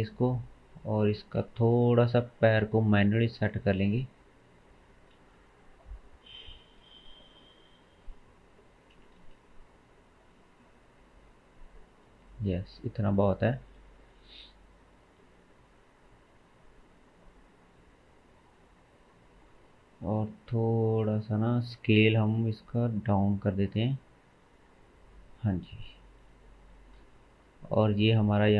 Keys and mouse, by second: 0.9 click, 1.1-3.0 shift+middle drag, 3.0-6.1 drag, 5.2 shift+z, 6.1-17.1 middle drag, 7.1 r, 9.2 shift+z, 17.1 click, 17.2-18.4 middle drag, 18.4-20.1 drag, 20.1-21.6 middle drag, 22.4 s, 25.9-26.2 shift+drag.